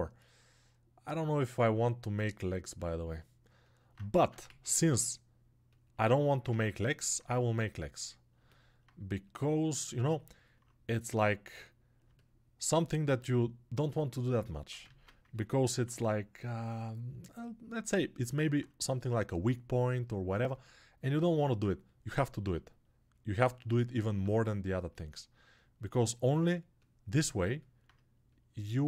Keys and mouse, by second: 4.2 ctrl+Tab, 4.3 shift+a, 14.1-18.2 alt+middle drag, 14.9 ctrl+Tab, 18.2-28.4 alt+drag, 28.4 alt+right click.